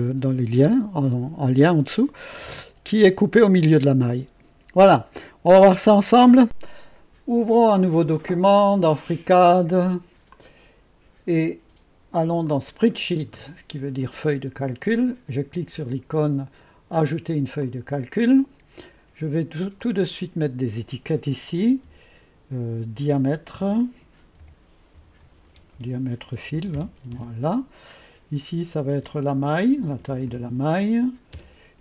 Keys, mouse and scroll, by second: 2.3 scroll up 2, 4.8 click, 5.7 click, 8.6 click, 10.3 click, 12.5 click, 17.6 click, 18.0-19.0 drag, 19.8-21.9 drag, 23.0-27.1 typing, 29.4-31.8 typing.